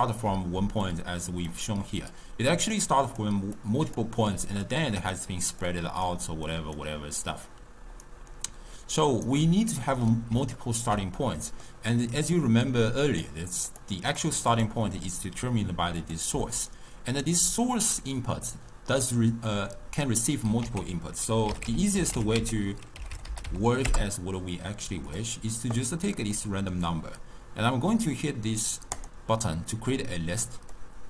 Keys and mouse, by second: 0.0-8.0 typing, 0.9 click, 2.8-3.3 drag, 3.6-4.0 drag, 4.7 click, 5.7 click, 6.5 click, 7.2 click, 8.1-9.3 right drag, 9.3 d, 9.4 d, 9.8-13.2 middle drag, 13.2-16.4 drag, 16.4 d, 16.7 right click, 17.3 d, 17.4 d, 20.7 ctrl+a, 26.4-29.5 middle drag, 29.5 click, 30.8-31.0 drag.